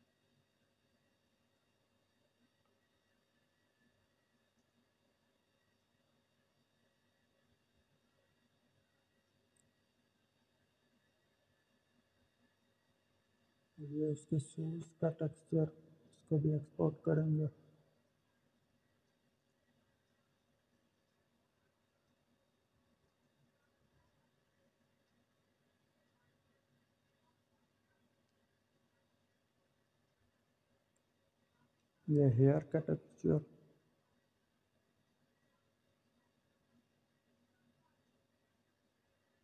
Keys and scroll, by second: 5.8-7.3 typing, 21.9-23.6 typing, 32.7-34.1 typing.